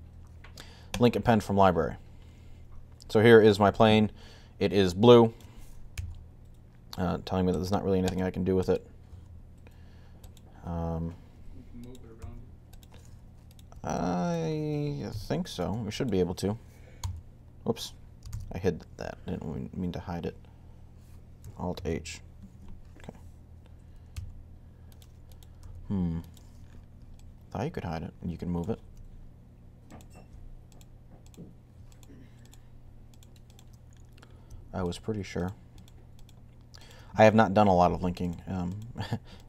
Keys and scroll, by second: 5.8 g, 8.9 g, 12.0 g, 16.6-17.3 typing, 18.1 super+z, 21.5 alt+h, 23.9 typing, 25.4 typing.